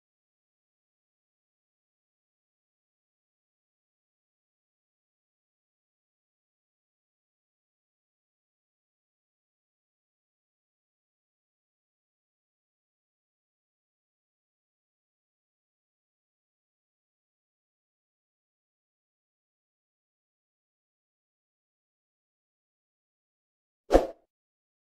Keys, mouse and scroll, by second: 4.5 click, 5.3 alt+middle click, 6.0-6.7 scroll up 1, 6.7 shift+click, 8.7 click, 10.2 shift+click, 10.6 shift+click, 11.1 shift+click, 12.4 click, 22.2-24.8 alt+middle drag.